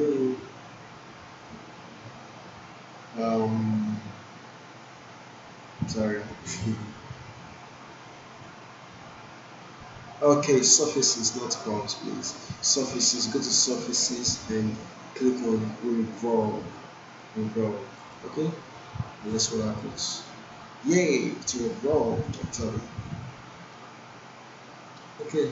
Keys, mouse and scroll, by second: 18.0 click, 21.4 click, 21.7-25.5 alt+drag, 25.4-25.5 alt+right drag.